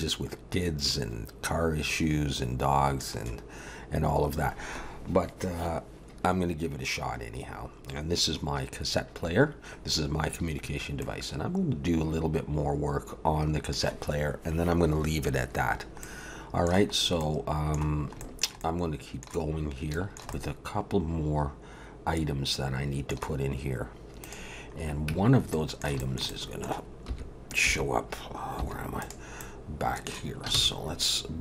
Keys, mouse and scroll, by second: 11.0 middle click, 16.0 middle click, 17.0 scroll up 1, 17.2 middle click, 18.2 shift+middle click, 18.6 middle click, 19.5-19.9 scroll up 2, 19.9 shift+middle click, 20.3 middle click, 24.2 click, 24.7-25.5 scroll up 2, 25.1 Tab, 25.5 middle click, 26.0 shift+middle click, 26.3 middle click, 27.1 3, 27.7 2, 28.6 3, 29.0 click, 29.4 middle click, 30.5 shift+s.